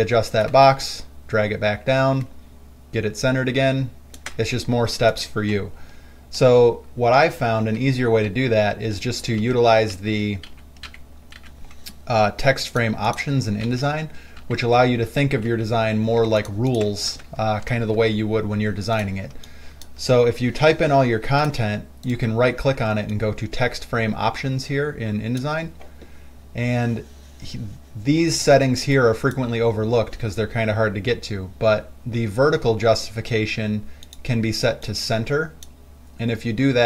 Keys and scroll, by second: 0.0 ctrl+alt+c, 7.5 ctrl+z, 8.0 ctrl+z, 8.5 ctrl+z, 9.7 ctrl+z, 10.2 ctrl+z, 10.7 ctrl+z, 11.1 ctrl+z, 11.6 ctrl+z, 13.9 ctrl+z, 14.7 ctrl+z, 15.4 ctrl+z, 15.7 ctrl+z, 18.0 ctrl+alt+c, 19.6 space.